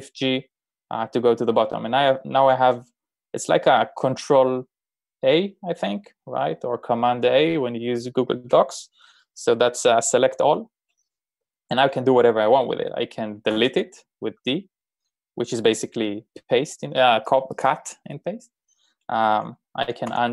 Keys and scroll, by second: 13.5 d, 20.0 u.